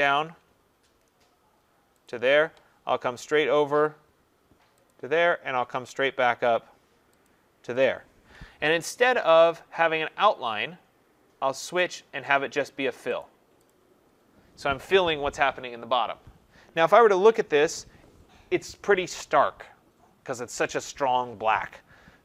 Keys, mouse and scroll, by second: 2.1 shift+click, 4.9 shift+click, 7.3 shift+click, 11.8 click, 13.2 click, 13.8 click, 17.3 ctrl+-.